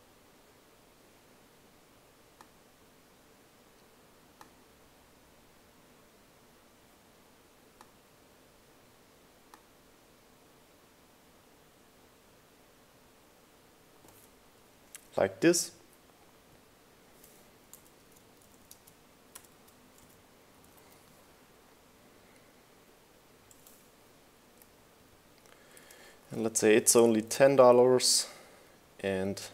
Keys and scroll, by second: 17.1 super+a, 17.3-21.4 typing, 23.1 Left, 23.6 Right, 24.8 Right, 25.3 Left, 26.1 BackSpace, 26.3 0, 29.2 Right.